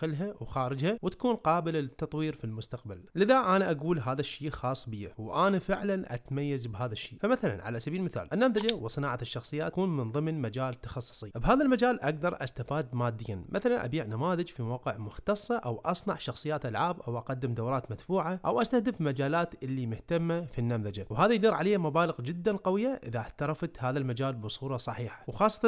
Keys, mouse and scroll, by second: 9.3 scroll down 1, 9.4 click, 10.3 g, 10.6 g, 11.4 click, 11.6 g, 12.2 g, 12.7 ctrl+r, 13.1 shift+middle click, 13.3 click, 14.2 f, 14.3 f, 14.8 click, 15.4 click, 15.5 f, 15.7 click, 16.1 click, 16.6 ctrl+z, 16.8-17.2 scroll up 2, 17.2 middle click, 17.4 ctrl+click, 17.7 ctrl+click, 17.8 ctrl+click, 18.0 ctrl+e, 18.3 scroll up 1, 18.7 click, 18.9 shift+middle click, 19.5 middle click, 19.9 click, 20.4 middle click, 20.6 c, 21.1 ctrl+e, 21.3 `.